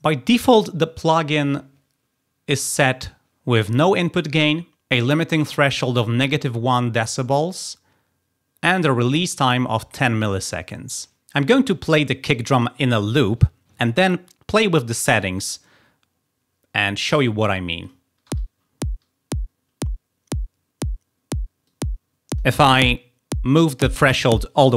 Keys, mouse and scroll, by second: 17.8 click, 18.2 i, 21.6 click.